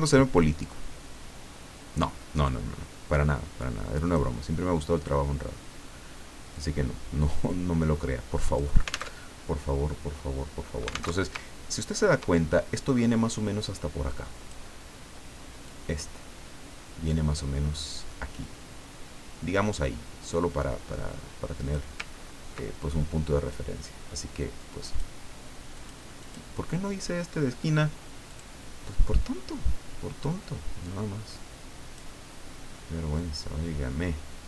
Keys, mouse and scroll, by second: 0.4-4.4 drag, 6.5-8.7 drag, 9.1 alt+Tab, 11.1 alt+Tab, 11.5-11.9 ctrl+alt+scroll down 3, 12.2-13.2 ctrl+drag, 14.1 click, 15.6-22.0 drag, 22.2 ctrl+scroll up 2, 23.5-25.1 drag, 25.7 click, 26.2 click, 28.3 click, 30.2-32.4 drag, 33.1-34.4 drag.